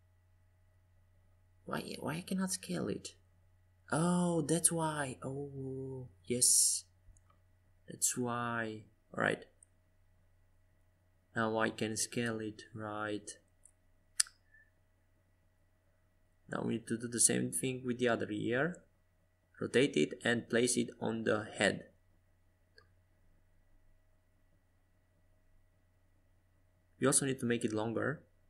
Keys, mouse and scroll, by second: 4.6-6.8 middle drag, 8.0 Tab, 9.9 g, 14.1 Tab, 16.0 g, 20.7 Tab, 21.7 Tab, 25.6-28.0 right drag.